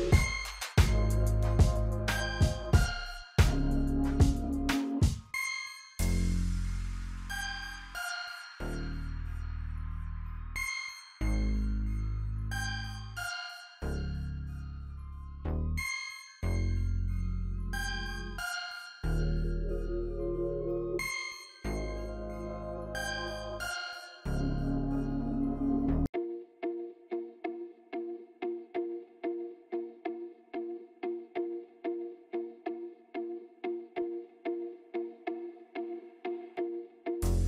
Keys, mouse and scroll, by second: 3.6-6.0 drag, 6.0 F9, 6.7-11.3 drag, 11.3-20.7 drag, 20.7-37.4 alt+drag.